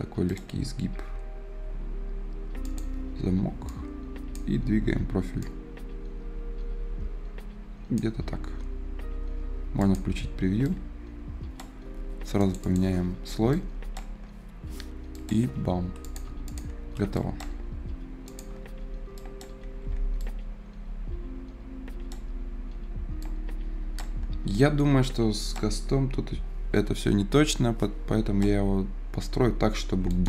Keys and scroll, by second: 19.5 Escape, 29.8 Escape.